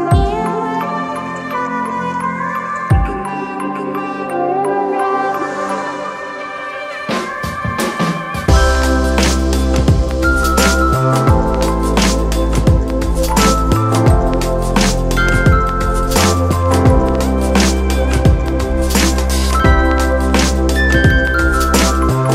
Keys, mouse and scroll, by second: 4.2 ctrl+=, 12.1 alt+shift+click, 21.1 ctrl+click.